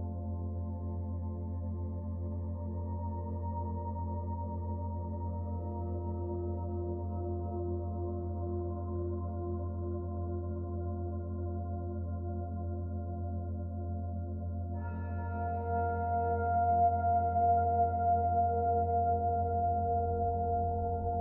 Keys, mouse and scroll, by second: 0.7 Tab, 2.3 click, 8.0 click, 10.5 click, 15.3 right click, 16.6 middle click.